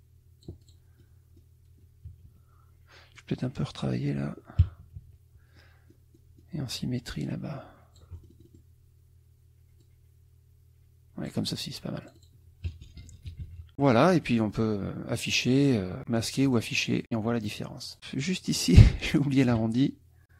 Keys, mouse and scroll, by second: 1.0 click, 2.1 KP_Subtract, 3.2 click, 4.8 KP_Subtract, 5.6 click, 5.7 middle click, 7.3-8.7 shift+drag, 9.8-11.5 drag, 12.0 click, 12.7 KP_Subtract, 13.7 click, 14.0 click, 15.1 click, 16.0 click, 16.5 click, 17.4 click, 17.9-18.7 drag, 19.2 shift+click, 20.3 click.